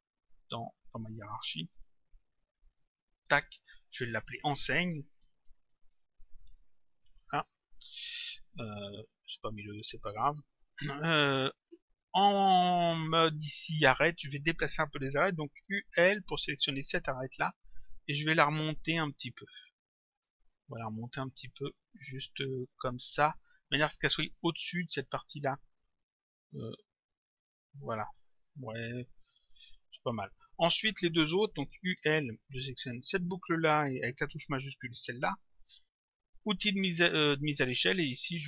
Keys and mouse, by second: 1.3 click, 2.6 click, 4.1 click, 5.0-7.0 typing, 7.1 Return, 9.3 click, 10.5 click, 13.1 click, 15.7 u, 17.3 click, 20.1 click, 21.7 click, 26.1 click, 31.7 u, 33.2 click, 34.6 shift+click, 36.5 click.